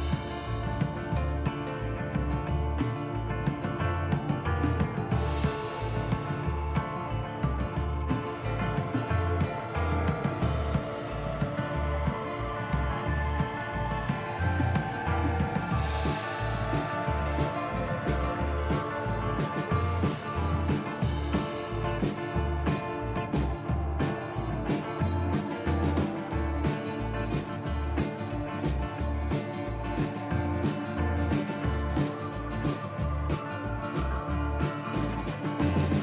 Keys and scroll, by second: 1.1 ctrl+z, 1.8 ctrl+z, 2.4 ctrl+z, 9.2 ctrl+z, 17.8 ctrl+z, 29.7 ctrl+c, 29.9 ctrl+v, 30.8 F4, 32.0 F4.